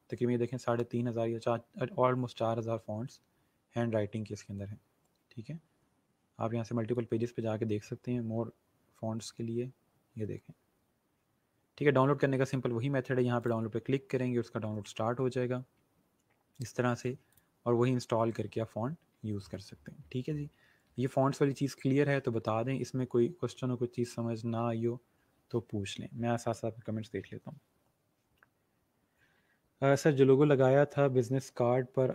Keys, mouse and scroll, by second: 1.9 scroll down 1, 8.1 click, 9.0 scroll down 1, 13.3 click, 17.2 click, 17.7 scroll down 1, 19.1 scroll up 1, 22.3 scroll down 1.